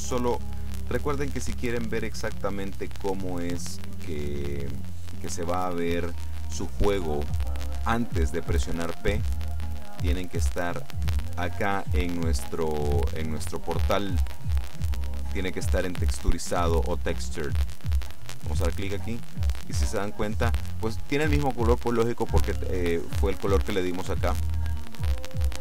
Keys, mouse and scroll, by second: 10.0 click, 18.7 click, 22.9-23.9 middle drag, 24.4 click.